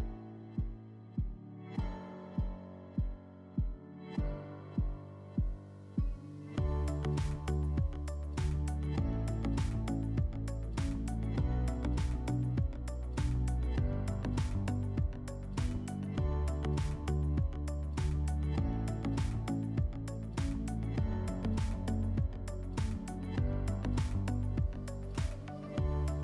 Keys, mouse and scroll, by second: 1.8 click, 2.9 click, 4.0-4.5 drag, 6.6 click, 7.1 click, 8.5 alt+middle click, 10.1 click, 11.1 click, 11.5 click, 13.4 click, 15.0 click, 16.7 click, 17.6 click, 19.0 click, 19.1 click, 19.3 click, 19.5 click, 20.3 click, 22.1 alt+w, 23.6 click, 24.5 click, 25.1 alt+w.